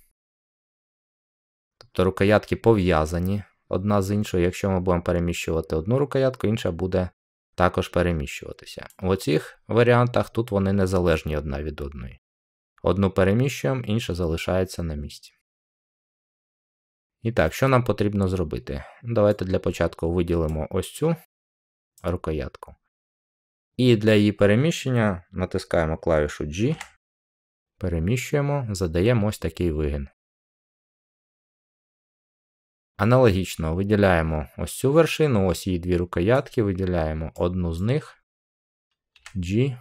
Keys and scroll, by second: 26.6 g, 39.0 g.